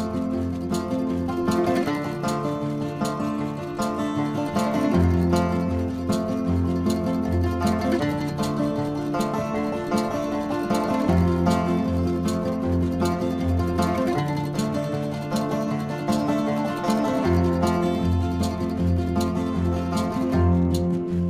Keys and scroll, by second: 2.7 space, 4.9 space, 5.1 ctrl+alt+z, 6.2 ctrl+-, 9.4 space, 13.0 space, 15.1 ctrl+-, 15.6 ctrl+=, 15.8 space, 16.4 ], 18.4 ctrl+alt+z, 20.3 ctrl+alt+z, 21.1 space.